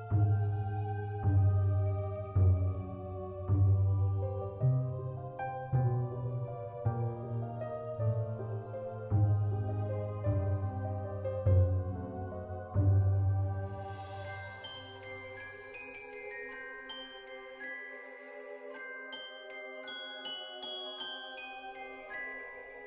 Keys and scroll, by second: 1.0 9, 1.6 Return, 3.1 z, 12.2 alt+x, 14.6 z, 16.6-19.5 typing, 19.6 Return.